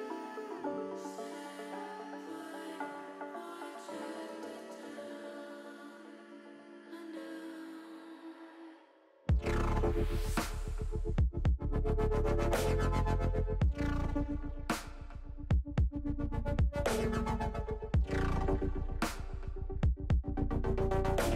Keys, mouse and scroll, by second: 1.2 middle click, 4.1 click, 4.9 KP_1, 6.9 click, 8.8 click, 9.8 click, 10.8 KP_1, 12.2 shift+middle click, 13.8 shift+middle click, 15.3 ctrl+r, 17.7 click, 19.0 ctrl+r.